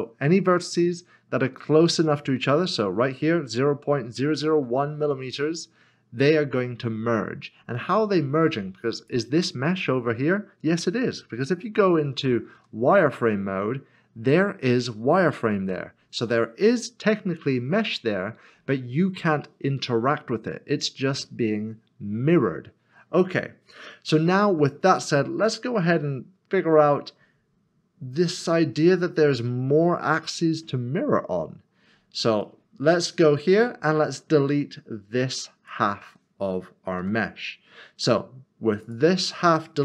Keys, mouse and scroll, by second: 9.0 click, 12.5 z, 32.4 middle click, 34.2 click, 37.0 x, 38.8 click.